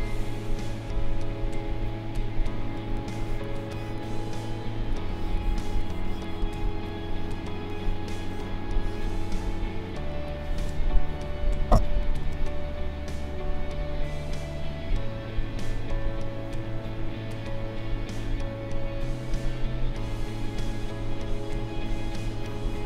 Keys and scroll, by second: 2.9 space, 21.9 space.